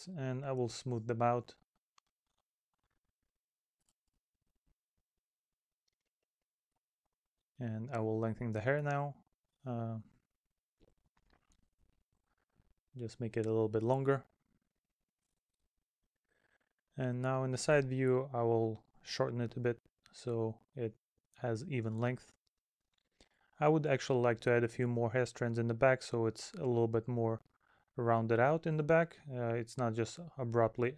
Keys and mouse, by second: 5.6 middle click, 6.4 middle click, 8.8 middle click, 11.3 middle click, 12.0 middle click, 12.6 middle click, 15.7 middle click, 16.9 middle click, 24.8 middle click, 27.8 middle click, 29.1 middle click, 30.0 middle click.